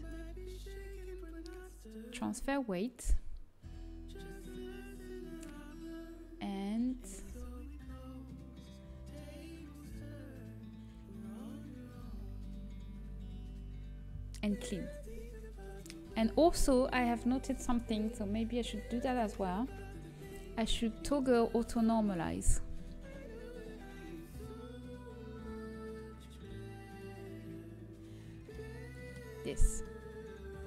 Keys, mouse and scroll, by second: 0.1 click, 1.0-2.1 middle drag, 2.1-3.9 drag, 14.9-17.7 drag, 29.6-30.6 middle drag.